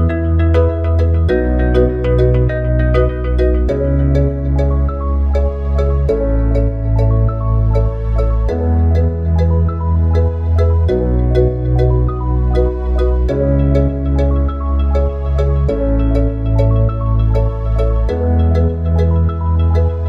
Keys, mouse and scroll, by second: 2.3 e, 8.3 Tab, 13.6 shift+a, 17.5 click, 19.4 s.